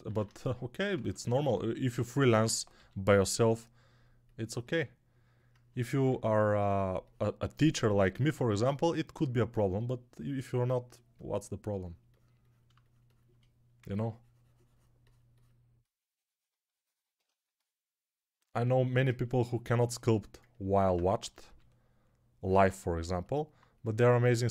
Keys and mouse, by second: 0.0 alt+q, 0.5-9.0 ctrl+right drag, 0.8 ctrl+Tab, 2.6 g, 4.4-9.0 alt+drag, 4.4-9.0 alt+middle drag, 5.9 2, 13.7 3, 21.3 g.